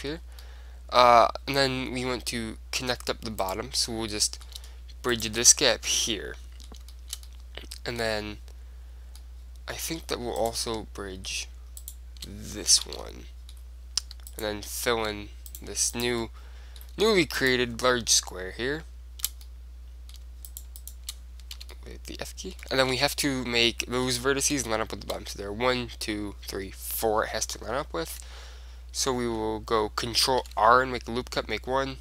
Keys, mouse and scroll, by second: 3.5-5.2 right drag, 4.0-5.7 middle drag, 5.3-7.2 right drag, 6.1 f, 6.2-9.1 middle drag, 6.4 click, 9.3-11.1 middle drag, 10.5-13.2 right drag, 13.0 f, 13.2 click, 13.2-14.9 middle drag, 13.4 right click, 14.5-19.2 right drag, 16.5 middle click, 19.2-20.6 middle drag, 20.6-22.6 right drag, 21.4 middle click, 21.7 f, 21.8-26.7 middle drag, 30.5 ctrl+r.